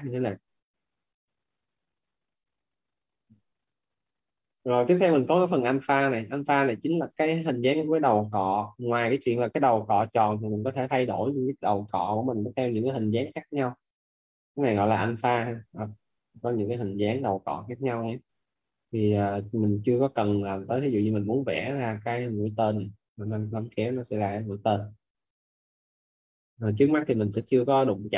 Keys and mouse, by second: 3.7 z, 7.9 click, 20.4 click, 25.4 ctrl+z, 26.6 click.